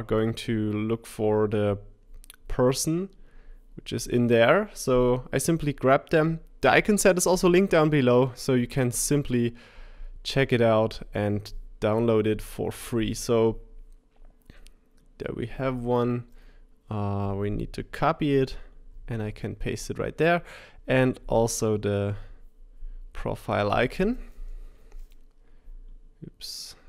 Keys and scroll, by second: 18.9 super+c, 18.9 super+v, 24.7 super+c.